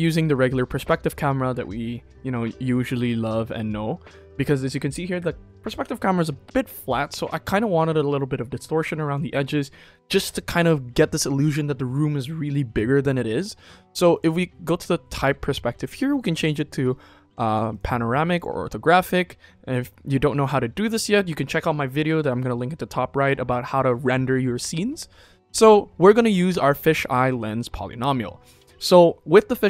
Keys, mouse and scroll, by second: 14.0-17.7 drag, 18.3 click.